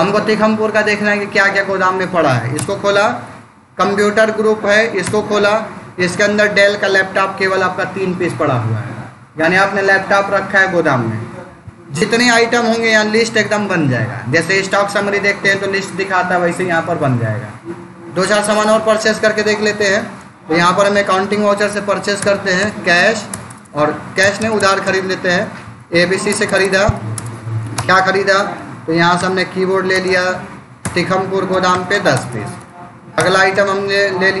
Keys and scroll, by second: 2.4 Return, 4.9 Return, 18.6 Escape, 20.8 v, 21.5 F9, 22.1 Return, 22.7 c, 23.2 Return, 24.1 BackSpace, 25.5 Down, 25.6 Up, 26.2 Return, 26.8 ctrl+a, 27.0 Return, 27.6 space, 27.8 Down, 29.0 Return, 29.8 space, 30.0 Down, 30.7 Return, 31.4 1, 31.8 Return, 33.4 space, 33.5 Down.